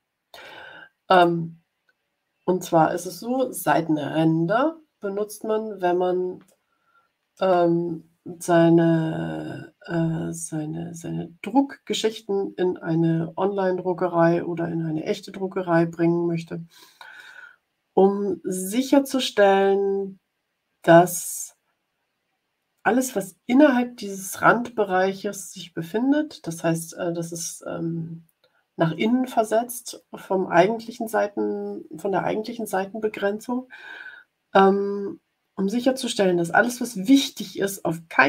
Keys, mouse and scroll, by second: 1.0-2.4 drag, 4.6 ctrl+scroll up 2, 5.4 ctrl+scroll up 2, 6.4-7.6 middle drag.